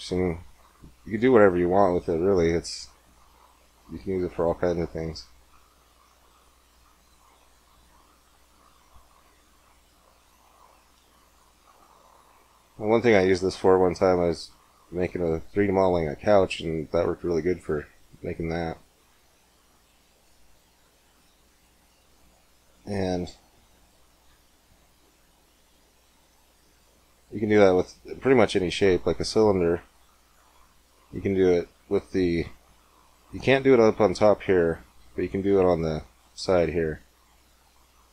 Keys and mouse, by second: 0.3 click, 3.1-5.0 drag, 4.2 ctrl+r, 7.5 ctrl+r, 10.2-12.8 drag, 10.9 Tab, 16.3-18.5 drag, 20.3 x, 24.1 shift+a, 29.1-31.1 drag, 31.6 Tab, 34.9 ctrl+r.